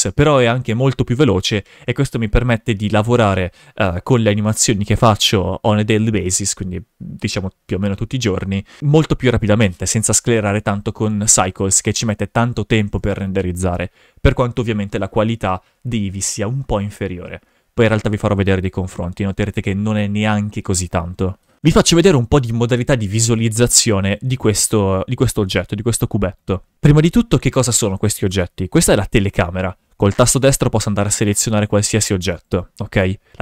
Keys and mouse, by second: 10.5 shift+f, 21.7 shift+f, 28.2 right click, 28.9 g, 30.1 right click, 31.1 right drag, 31.6 right click, 31.9 right click, 32.4 right click, 33.3 g.